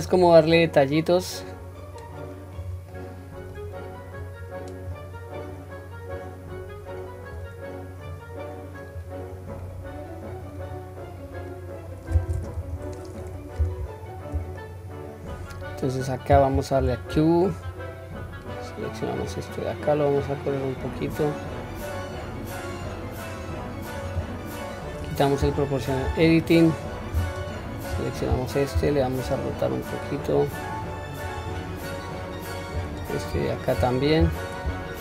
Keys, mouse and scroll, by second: 0.5 click, 0.8-2.6 drag, 2.9 middle click, 4.3 click, 6.1 click, 8.0 click, 9.3-9.6 scroll down 1, 9.6-10.6 middle drag, 11.0-11.5 scroll down 2, 11.5-12.0 middle drag, 12.5 KP_1, 13.2-14.2 scroll up 1, 14.2 scroll up 1, 14.6-15.1 shift+middle drag, 16.8 q, 17.7-19.2 drag, 20.2 click, 20.4-23.4 drag, 25.9 click, 27.3 alt+click, 28.8 r, 32.9 alt+click, 34.2 r.